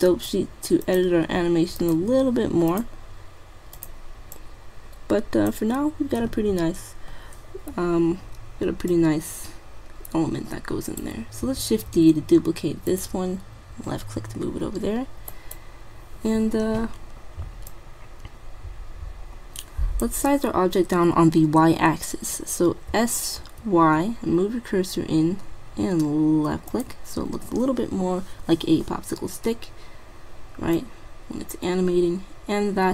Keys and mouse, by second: 2.8-3.9 2, 5.6 click, 5.6 typing, 8.9-10.7 drag, 11.6 shift+d, 15.4-17.0 right drag, 17.7-19.5 drag, 22.9 s, 30.9-32.5 drag, 32.6 middle click.